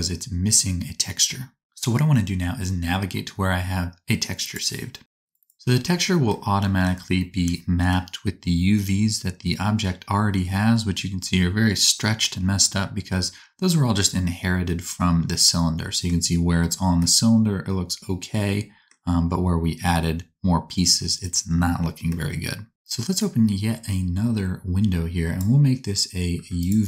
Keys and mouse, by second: 11.4-26.8 drag, 11.4-22.7 middle drag, 11.4-22.7 right drag.